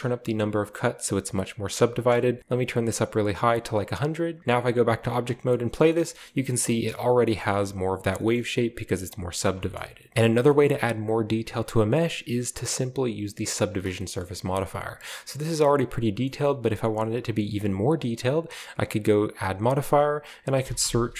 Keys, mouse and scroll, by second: 1.7 click, 2.2 1, 3.3 click, 3.8 click, 4.1 click, 4.7 Tab, 5.1 space, 5.3 scroll down 1, 5.9 shift+middle drag, 8.4 middle click, 8.5 Tab, 8.5-9.1 scroll up 1, 9.1 Tab, 9.5 middle click, 9.5-10.1 scroll down 1, 10.1 x, 10.4 shift+middle click, 10.6 shift+middle click, 11.9-12.7 scroll up 1, 13.7 space, 14.2 middle click, 16.3 middle click, 19.3 click, 20.5 typing.